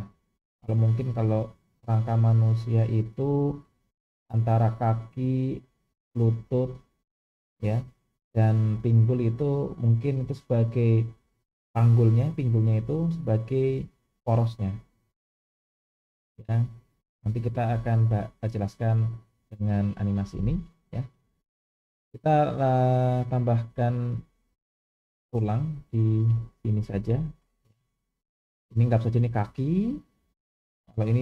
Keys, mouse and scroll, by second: 20.6-21.1 shift+middle drag, 23.3-24.3 drag, 25.3-25.8 scroll up 2, 25.9 shift+middle click, 26.9 click, 29.0-30.1 scroll down 1.